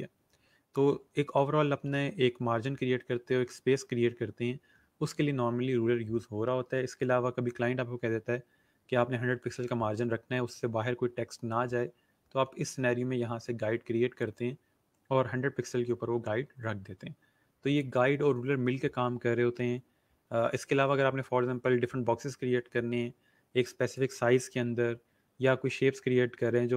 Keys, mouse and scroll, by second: 14.1 click.